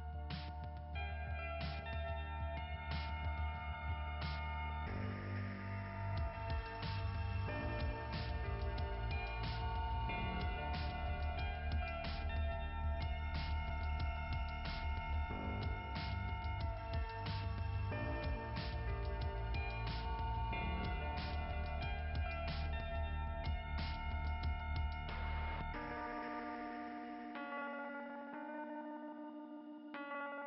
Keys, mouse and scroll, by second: 0.0 scroll down 1, 1.1-2.1 scroll up 2, 2.1 scroll down 2, 2.1 scroll up 2, 2.2-2.9 scroll down 2, 2.9 right click, 4.4 click, 5.3-5.7 scroll up 2, 7.1 right click, 8.7 click, 10.8 scroll up 2, 12.2 click, 20.0 click, 21.2 click, 21.8 click, 25.0 click, 25.2 click, 29.3 click.